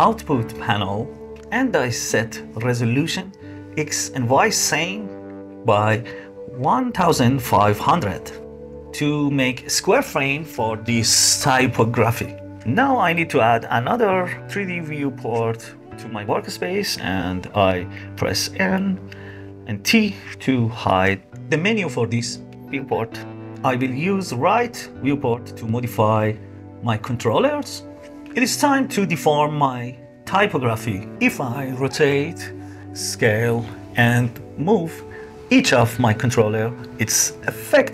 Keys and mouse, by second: 3.0-9.6 middle drag, 13.0-14.4 middle drag, 15.5 n, 18.4 n, 19.2 t, 21.6 click, 22.3-23.0 drag, 24.8 click, 26.5 click, 32.0 s, 33.2 s, 34.3 r.